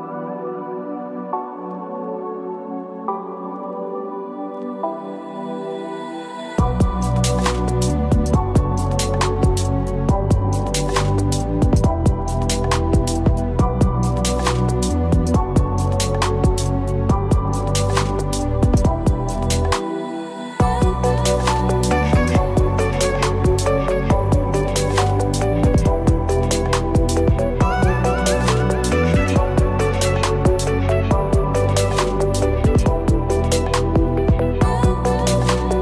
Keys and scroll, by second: 21.8 ctrl+g, 26.0 ctrl+-.